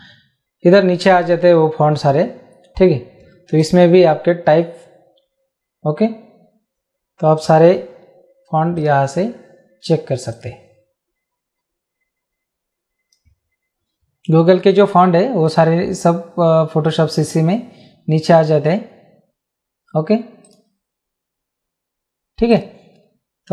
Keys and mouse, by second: 3.6 click, 7.4 click, 8.7 click, 10.3 click, 15.5 click, 20.4 click, 22.5 click.